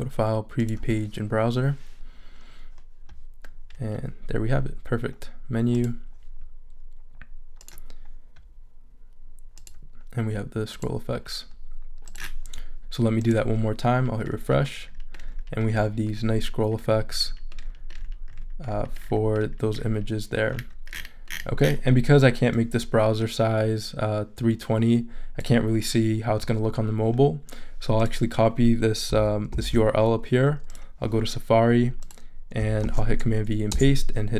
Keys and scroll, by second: 29.5 super+c, 32.8 super+v, 33.7 super+Return.